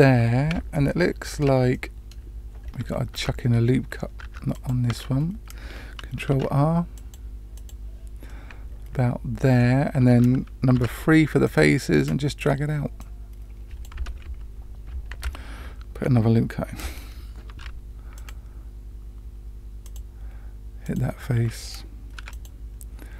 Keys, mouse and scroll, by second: 0.7-1.4 shift+middle drag, 1.7-2.1 middle drag, 2.6 scroll up 2, 3.1 Tab, 4.2 Tab, 4.5 click, 4.8 Tab, 6.2 ctrl+r, 8.2-9.6 middle drag, 10.7 3, 11.4 click, 11.9 middle click, 12.9 click, 15.1 ctrl+z, 17.4 ctrl+r, 20.8 click, 22.1 3, 22.3 click.